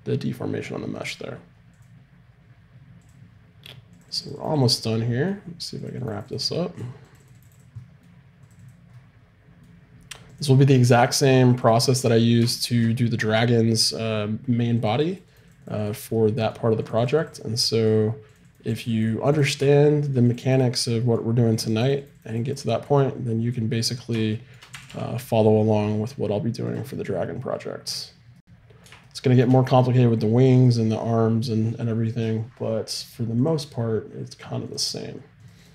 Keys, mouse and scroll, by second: 1.7 click, 4.0-7.9 drag, 8.0-12.1 drag, 9.2-11.7 middle drag, 12.1-14.8 middle drag, 14.8-24.3 drag, 16.2-18.5 middle drag, 24.3-25.3 middle drag, 24.7 r, 28.1 right click, 28.5-33.3 middle drag, 28.7 click, 28.7 right click, 33.3-35.7 drag.